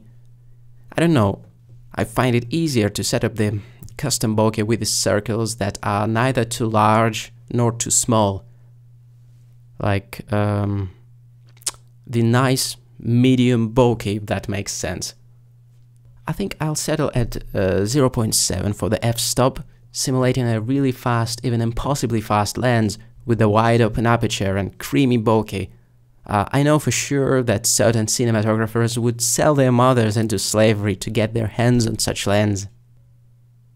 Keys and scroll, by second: 4.5 1, 10.2 1, 16.2 typing, 17.5 7.